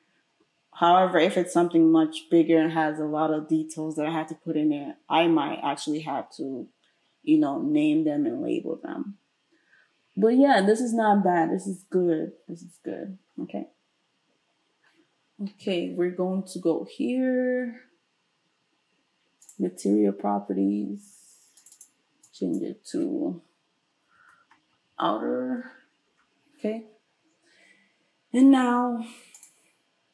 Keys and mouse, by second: 19.5-21.6 middle drag, 21.6 click, 21.7 middle click, 21.8-29.5 drag, 24.6 t, 29.5-30.1 middle drag.